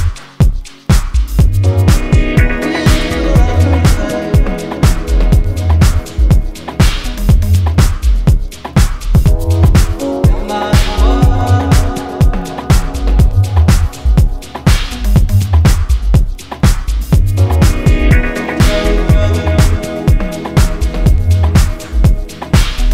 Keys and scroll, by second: 12.1 ctrl+KP_Subtract, 12.2 ctrl+KP_Subtract, 12.4 ctrl+KP_Subtract, 12.5 ctrl+KP_Subtract, 14.5 KP_Add, 14.7 KP_Add, 14.9 KP_Add, 19.8 ctrl+KP_Subtract, 19.9 ctrl+KP_Subtract, 20.0 ctrl+KP_Subtract.